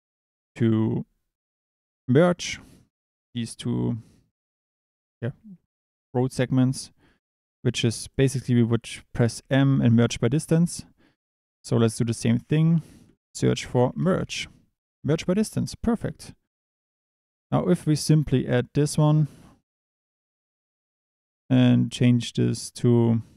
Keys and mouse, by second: 0.2 click, 8.0 click, 9.3 m, 10.3 click, 11.4 click, 11.8 shift+a, 18.8 click, 22.3-23.3 drag.